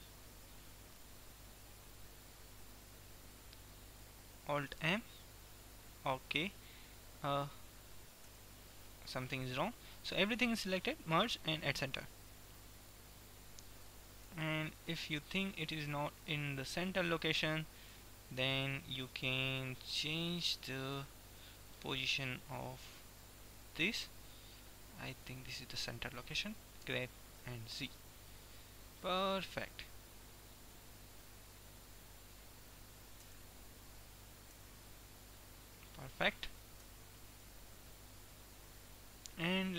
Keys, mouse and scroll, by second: 11.2-12.9 drag, 12.9-14.4 middle drag, 14.4 KP_1, 15.0-16.0 middle drag, 18.0 KP_1, 20.2-22.0 drag, 22.4-24.2 drag, 27.0 g, 29.0 click, 33.4 Tab, 34.4 Tab, 34.9 Tab, 35.0-37.0 middle drag, 37.0 KP_1, 38.0 middle click.